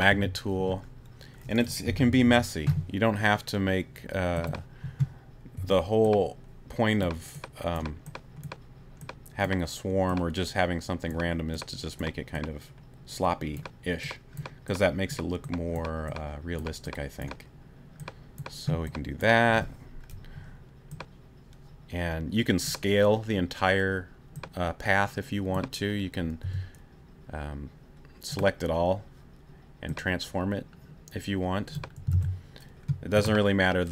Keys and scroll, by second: 0.1 t, 1.8 ], 5.6 ], 26.4 t, 33.1 super+t.